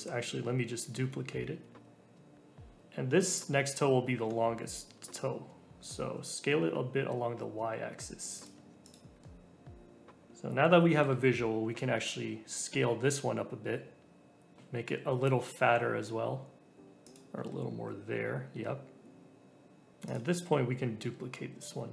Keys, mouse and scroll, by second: 0.8 shift+d, 2.4-4.0 shift+middle drag, 4.0 s, 8.5 Tab, 8.8 click, 9.2-10.2 middle drag, 10.2 click, 11.0 ctrl+l, 12.4 s, 16.8 g, 17.3 Tab, 17.7 scroll up 2, 18.0-18.6 scroll down 3, 18.6-19.9 middle drag, 20.0 click, 21.0 ctrl+l.